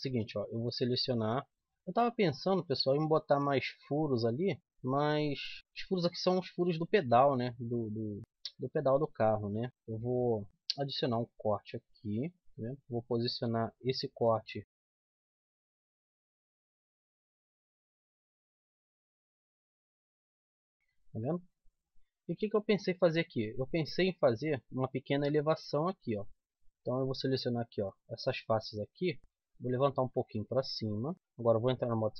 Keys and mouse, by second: 0.4 right click, 1.4 z, 1.5 z, 3.6 z, 4.6 KP_1, 5.2 KP_7, 8.2-9.3 middle drag, 10.4 middle click, 10.8 ctrl+r, 12.5-13.9 drag, 13.9 middle click, 15.6 middle click, 15.9 click, 18.0-19.2 middle drag, 18.5 z, 18.8 z, 20.4 middle click, 20.7 z, 22.7 middle click, 24.7-26.0 middle drag, 26.0-28.0 drag, 26.6-29.2 right drag, 29.2 middle click, 29.7-31.1 drag, 31.9 click.